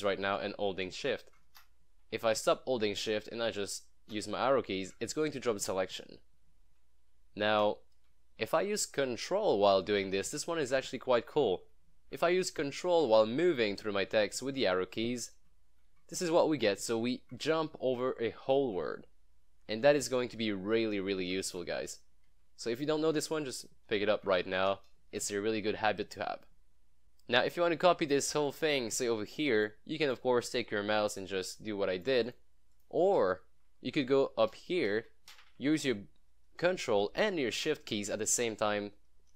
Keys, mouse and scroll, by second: 0.0 shift+Left, 1.7 shift+Right, 4.2 Right, 4.8 ⧓, 7.0 Left, 10.1 ctrl+Left, 10.6 ctrl+⧓, 12.8 ctrl+Right, 13.9 ctrl+Down, 14.6 ctrl+Up, 15.3 ctrl+Left, 16.2 ctrl+Right, 16.9 ctrl+Left, 17.3 ctrl+Right, 17.6 ctrl+Left, 17.9 ctrl+Right, 18.2 ctrl+Left, 18.6 ctrl+Right, 20.0 ctrl+Left, 20.1 ctrl+Right, 20.9 ctrl+Left, 21.2 ctrl+Right, 21.8 ctrl+Left, 22.8 ctrl+Right, 23.4 ctrl+Left, 24.0 ctrl+Right, 25.7 ctrl+Left, 27.0-29.8 drag, 33.5 Right, 35.0 ctrl+Right, 35.4 ctrl+Left, 38.1 ctrl+Left, 38.6 ctrl+shift+Right.